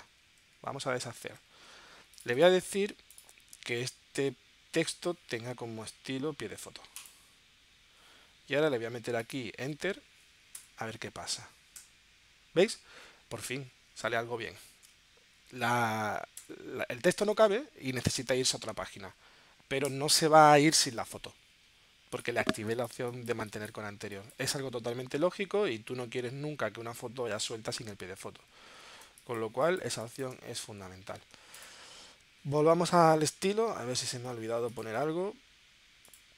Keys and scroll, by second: 0.5 super+z, 1.0 super+z, 10.6 Return, 12.1 Return, 15.0 super+z, 16.4 Return, 17.7 super+z, 19.9 Return, 22.5 space, 29.0 space, 31.0 super+z.